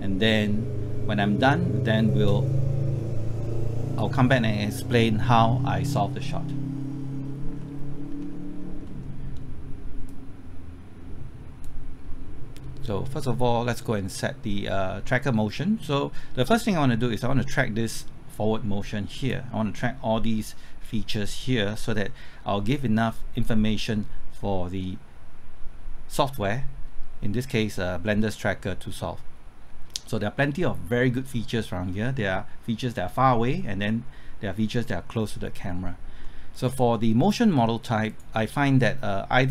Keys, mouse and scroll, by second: 7.6 middle click, 8.1-8.5 scroll up 1, 8.5 scroll down 1, 8.8 middle click, 10.0-19.3 drag, 26.0 scroll up 1, 26.4 scroll down 1, 36.2 middle click, 38.0 click.